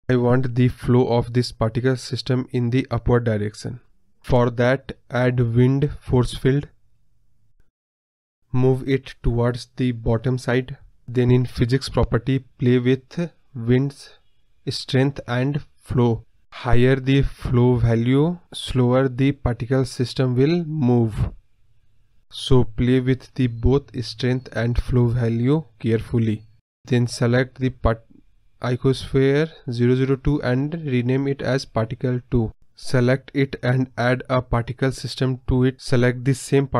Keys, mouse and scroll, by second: 0.1 scroll up 2, 0.2 middle drag, 0.4-1.6 scroll down 4, 0.5-0.9 middle drag, 1.6 KP_4, 2.2 scroll down 1, 2.3-2.7 middle drag, 2.7 KP_1, 3.1-3.7 scroll up 2, 3.7-4.7 shift+scroll down 1, 10.6 scroll down 2, 10.7-11.5 scroll up 1, 11.5-12.7 drag, 12.9-13.7 scroll down 1, 13.7 click, 16.1-16.6 scroll up 1, 16.6-17.4 scroll down 1, 17.7-23.4 drag, 23.4 scroll down 1, 23.6-24.3 scroll up 1, 27.7-29.3 scroll up 2, 29.3-34.2 drag, 35.1 click.